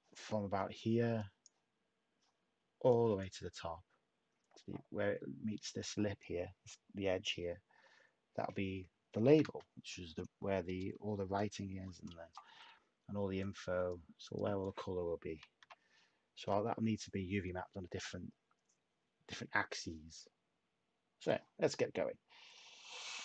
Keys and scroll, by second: 9.2 a, 15.5 /.